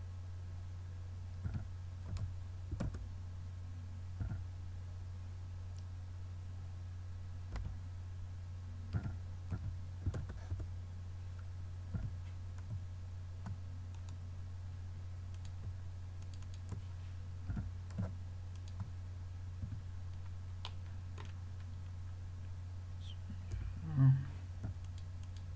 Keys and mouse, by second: 1.5 r, 9.0 r, 12.0 g, 15.4-18.2 drag, 17.5 g, 19.7 a, 23.6 l, 24.9-25.5 drag.